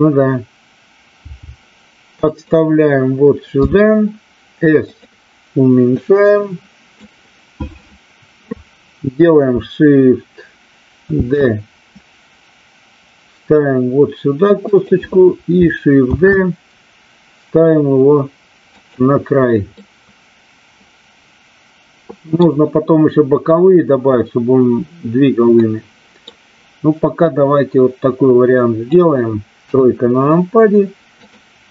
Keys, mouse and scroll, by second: 1.2 g, 2.2 click, 3.6 s, 4.8 click, 5.8-6.9 drag, 11.1 shift+d, 14.6 click, 16.1 shift+d, 18.7 click, 19.7-22.3 middle drag, 25.6 middle click, 27.2-28.8 drag, 29.6 KP_3, 31.2 click.